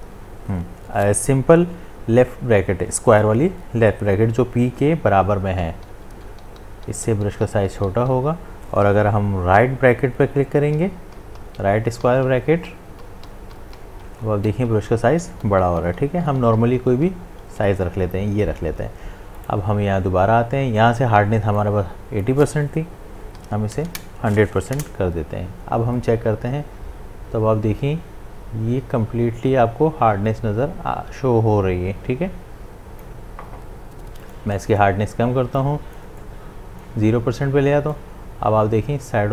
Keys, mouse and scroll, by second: 5.6-9.1 typing, 10.5-17.8 typing, 19.4 right click, 21.6-24.7 drag, 26.0-34.2 drag, 34.2 right click, 35.5-39.3 drag.